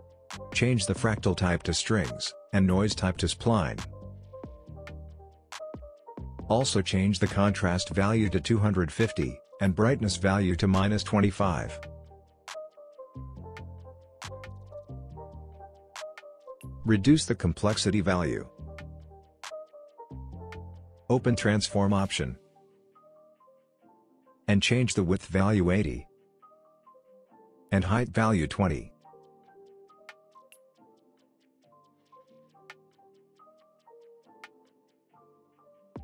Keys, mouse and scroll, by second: 1.3 click, 7.1 click, 9.7 Return, 11.2 click, 16.0 Return, 17.8 click, 19.8 Return, 22.1 click, 26.6 Return, 28.5 click, 29.9 Return, 31.9-32.8 drag.